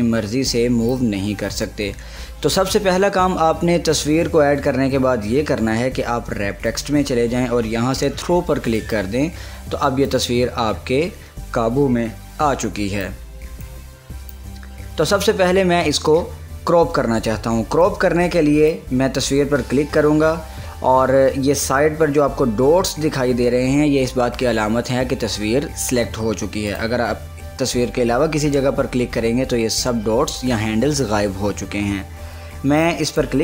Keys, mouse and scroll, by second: 6.9 click, 9.6-14.7 drag, 18.0-21.2 drag, 26.9 click, 33.3 click.